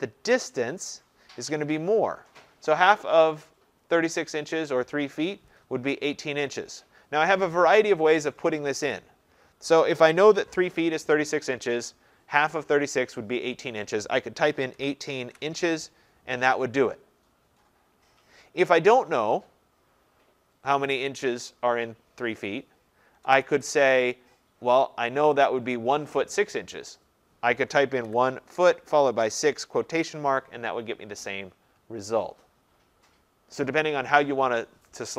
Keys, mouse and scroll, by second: 14.3-15.8 typing, 23.0 BackSpace, 23.2 BackSpace, 23.4 BackSpace, 23.6 BackSpace, 28.1-30.4 typing.